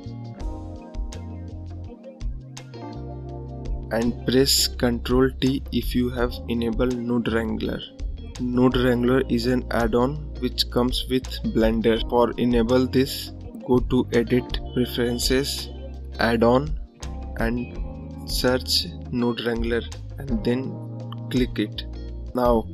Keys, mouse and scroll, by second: 13.1-17.2 drag, 22.1-22.7 drag.